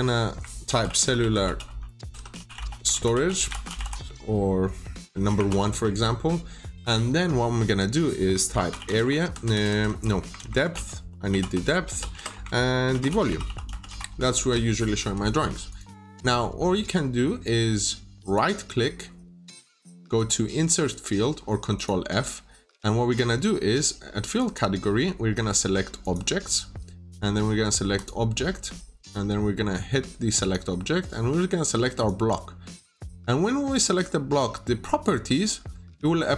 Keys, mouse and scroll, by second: 0.3-5.3 typing, 5.7 Return, 8.2-14.7 typing, 15.6 click, 18.1 right click, 21.6 click.